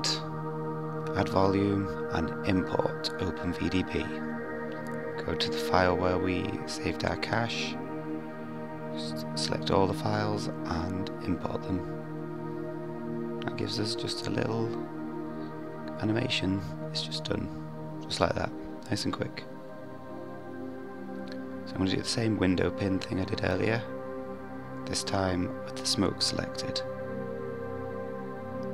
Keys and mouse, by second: 12.9 click, 13.6 click, 17.4 click, 20.3-21.4 drag, 22.0-22.9 drag, 24.3 click, 26.9 click.